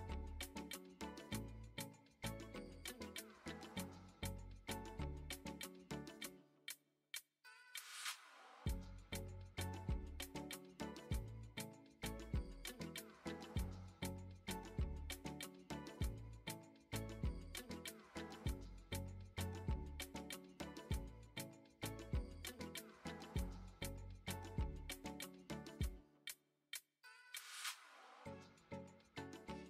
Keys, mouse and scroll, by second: 0.4-2.4 drag, 2.8 KP_7, 4.3-5.9 drag, 6.3-6.6 shift+middle drag, 8.8-13.0 drag, 14.2 shift+middle click, 15.2-15.7 middle drag, 16.1 shift+middle click, 16.6-17.0 middle drag, 17.2 shift+middle drag, 18.3 click, 18.7 middle click, 20.2 click, 20.9 click, 21.7 click, 24.3 click.